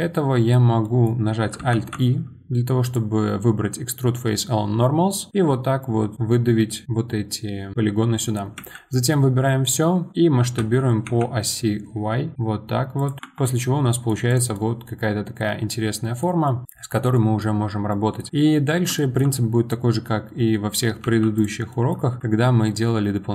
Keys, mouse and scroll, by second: 1.7 alt+e, 6.8-8.6 middle drag, 8.6 a, 9.3-10.4 middle drag, 10.4 s, 13.2 scroll down 2, 13.2 Tab, 13.4-14.3 middle drag, 14.3 click, 14.5-17.6 middle drag, 17.6 scroll up 2, 17.9-19.9 middle drag, 19.9 Tab, 21.0 1, 21.4 click, 21.7-23.3 middle drag.